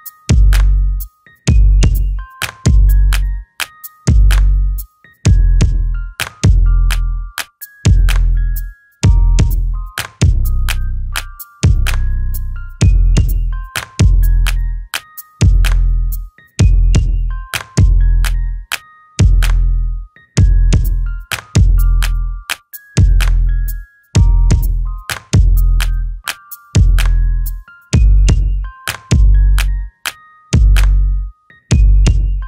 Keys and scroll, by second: 0.3 t, 1.0 alt+t, 3.2 space, 3.9 f, 7.0 shift+space, 7.8 f, 9.7 space, 9.8 Escape, 10.8 alt+t, 12.6 m, 14.6 s, 18.2 space, 18.5 f, 21.1 m, 23.9 f, 24.8 space, 25.3 Delete, 26.1 Escape, 26.1 space, 32.3 alt+t.